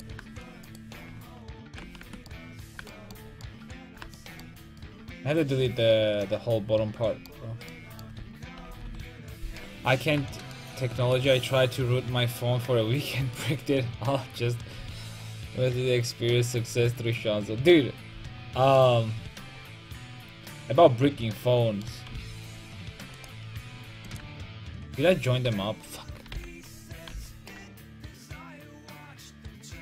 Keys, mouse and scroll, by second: 1.7 ctrl+j, 2.1 Tab, 8.8 KP_5, 8.8 KP_1, 19.2-20.4 middle drag, 22.1 c, 23.2 click, 23.9 Tab, 23.9-26.3 right drag, 24.2 Tab, 25.1 a, 25.5 a, 26.3 l, 27.1 h, 27.6 Tab, 28.0 Tab.